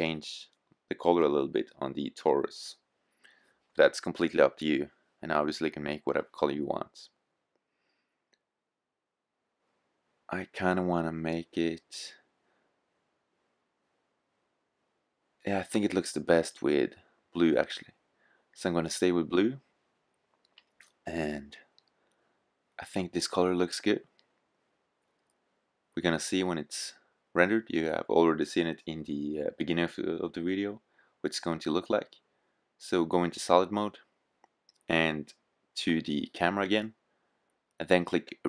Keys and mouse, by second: 4.8-8.3 drag, 31.6-32.9 drag, 36.3-38.1 drag.